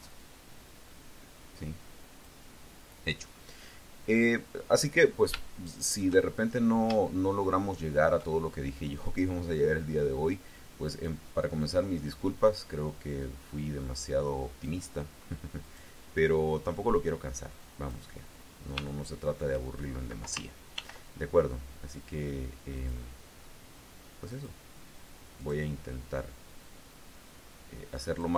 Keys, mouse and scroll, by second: 5.3 shift+click, 6.1-6.7 shift+scroll up 3, 6.9-8.0 shift+drag, 8.9 click, 10.0-11.1 drag, 11.5-12.5 drag, 13.1-14.7 drag, 15.5 click, 16.5-17.9 drag, 18.3-18.6 scroll down 2, 18.7 shift+click, 20.6 ctrl+r, 22.6 click, 24.1 click, 25.3 click, 26.5-28.3 drag.